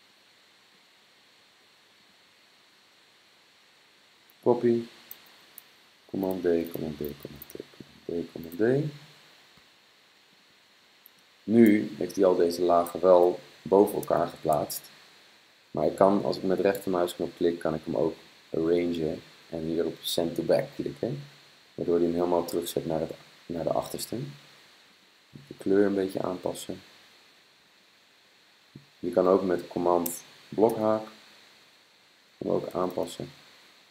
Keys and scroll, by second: 0.2-1.0 typing, 6.1 super+d, 6.5 super+d, 6.9 super+d, 7.4 super+d, 7.9 super+d, 13.1 super+z, 30.7 super+[, 32.5 super+[, 32.8 super+[, 33.0 super+[.